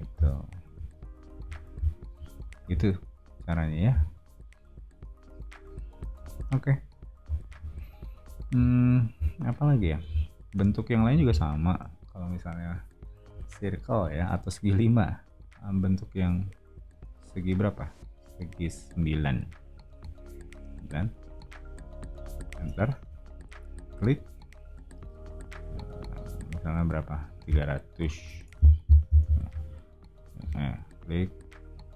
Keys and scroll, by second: 1.4 o, 14.8 c, 20.0 9, 22.4 Return, 27.7-29.0 typing, 30.1 p.